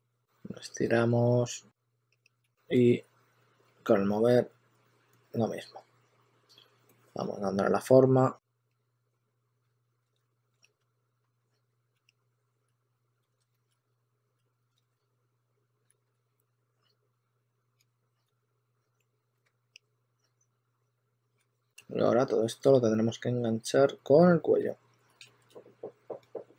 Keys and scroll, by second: 1.2-3.6 typing, 9.6 2, 10.1 2, 11.9-16.5 typing, 18.1 2, 18.7 2, 19.0 2, 21.1-22.2 typing, 26.1 s.